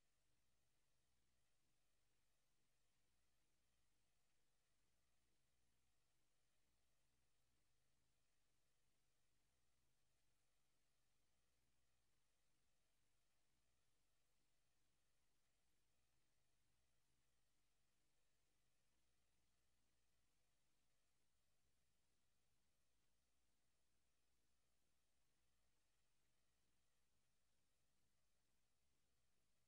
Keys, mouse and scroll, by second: 2.8 right click, 4.2 right click, 5.2 s, 6.1 right click, 6.6 right click, 11.4 s, 12.8 right click, 13.2 right click, 13.4 s, 15.2 right click, 15.4 right click, 15.7 s, 17.1 right click, 20.4 click, 25.1 Escape.